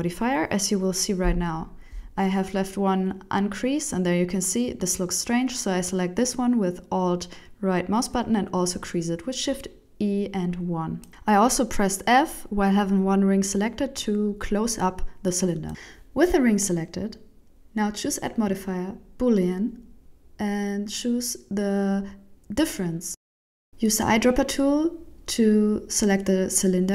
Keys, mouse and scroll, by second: 0.1 f, 0.3 shift+middle click, 0.6 Tab, 1.5 ctrl+1, 2.7 click, 3.1 middle click, 4.0 Tab, 5.1 alt+right click, 5.7 shift+e, 6.9 Tab, 7.1 middle click, 8.0 right click, 9.6 click, 15.8 middle click, 17.2 click, 17.5 click, 22.4 click, 23.7 click, 25.2 middle click, 26.8 click.